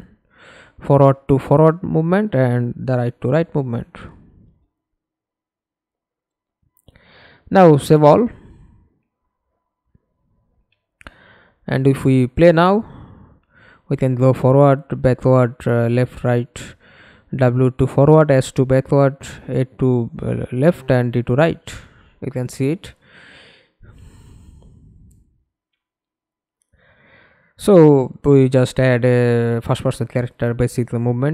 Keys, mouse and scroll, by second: 1.5 right click, 5.3 middle click, 6.7 ctrl+space, 9.4 middle click, 9.9 middle click, 11.2 middle click, 11.3 F11, 11.9 alt+p, 13.3-16.2 typing, 17.9-31.3 typing.